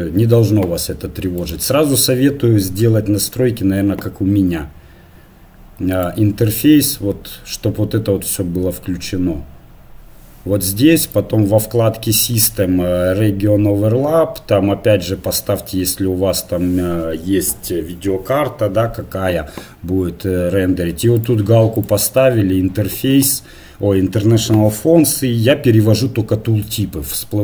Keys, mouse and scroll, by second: 0.5 click, 1.4-21.2 drag.